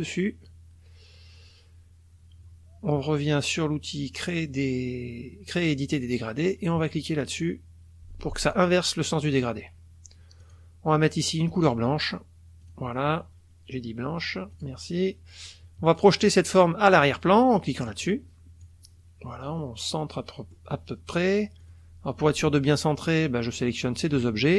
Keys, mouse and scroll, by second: 5.9 click, 8.5 click, 10.4 click, 12.6 click, 14.5 click, 15.9 click, 17.9 click, 18.6-20.1 drag, 20.2 middle click, 20.6 click, 21.6 click, 23.6 click, 24.0 shift+click.